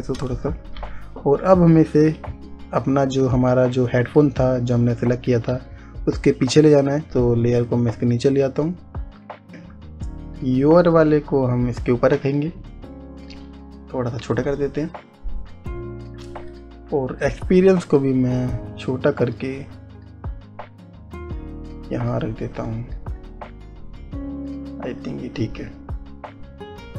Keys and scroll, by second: 0.8 Return, 6.1 ctrl+z, 17.0 Return.